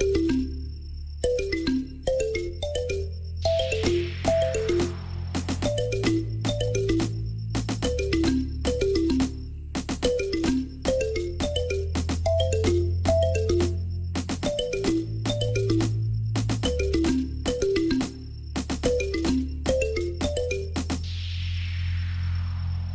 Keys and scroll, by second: 0.2 g, 0.7 y, 1.6 shift+z, 7.6 ctrl+c, 8.0 Return, 10.4 shift+z, 12.2 ctrl+v, 12.3 Return, 14.7 ctrl+v, 14.7 Return, 17.1 ctrl+v, 17.2 Return, 17.7 shift+z.